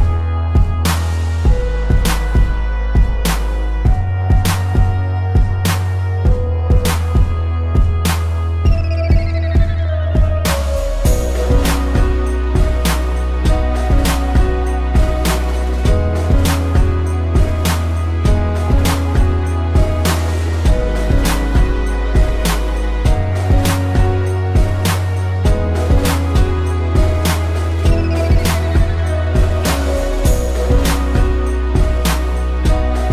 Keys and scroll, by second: 0.0 ctrl+=, 0.3 space, 4.5 space, 7.0 ctrl+-, 7.3 space, 7.7 ctrl+=, 8.1 space, 9.6 space, 10.5 ctrl+-, 10.9 space, 15.0 space, 17.7 ctrl+=, 18.0 space, 20.9 ctrl+-, 21.3 space, 23.2 a, 24.7 space, 26.8 ctrl+=, 27.2 p, 27.4 space, 30.2 space, 32.0 space.